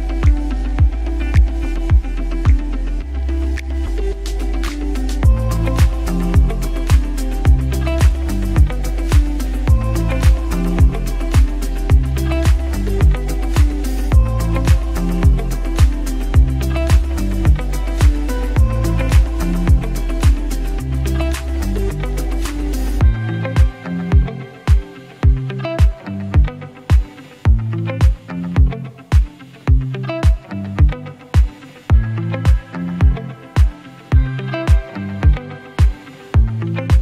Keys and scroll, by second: 0.6 space, 1.2 space, 1.9 space, 4.8 space, 8.9 space, 9.4 space, 10.6 space, 11.4 space, 17.1 ctrl+d, 20.5 space, 21.1 space.